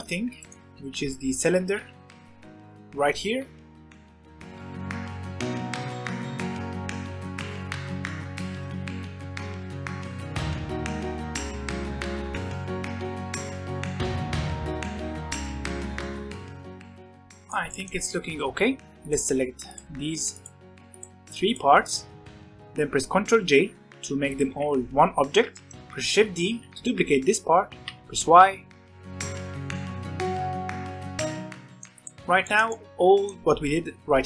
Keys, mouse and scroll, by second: 0.4 shift+right click, 0.7 shift+a, 1.6 Escape, 4.2 shift+a, 5.2 scroll down 4, 5.4 r, 6.3 s, 6.6 scroll up 4, 7.0 shift+middle drag, 7.3-12.4 typing, 8.0 middle click, 9.8 middle click, 10.2 Tab, 10.6 alt+a, 10.9 middle click, 11.6 scroll down 2, 12.2 scroll up 1, 13.8 middle click, 14.1 scroll up 1, 14.3-15.1 typing, 14.7 middle click, 16.8 shift+middle click, 16.9-17.3 scroll up 1, 17.3-18.1 middle drag, 18.1 scroll down 3, 18.3-19.0 middle drag, 19.0-19.8 scroll up 3, 19.8 click, 20.5 shift+click, 21.1 click, 21.7 click, 22.2 shift+click, 22.6 shift+click, 24.9 ctrl+j, 25.8 alt+a, 26.1 click, 26.3 g, 27.1 scroll down 3, 27.4-28.2 shift+middle drag, 28.2 shift+d, 31.8 shift+middle click, 31.9 click, 32.4-34.2 shift+middle drag, 34.2 scroll down 1.